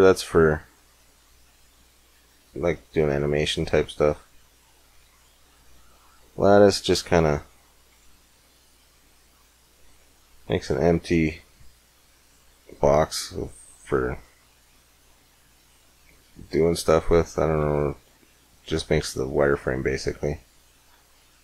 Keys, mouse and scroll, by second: 5.8 click, 7.7-8.7 drag, 10.4-13.2 middle drag, 10.4-10.9 scroll down 1, 10.9-11.8 scroll up 1, 13.9 middle click, 17.4 Tab, 18.8 Tab, 19.6 x.